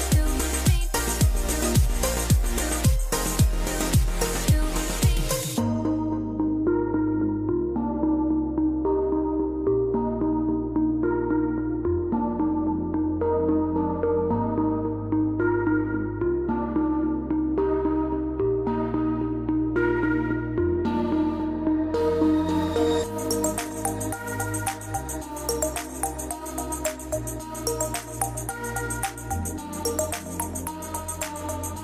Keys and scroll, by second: 1.2 KP_1, 1.4 KP_5, 1.7 Return, 17.4-18.9 typing, 22.2 F12, 24.2 F12, 31.5 Delete.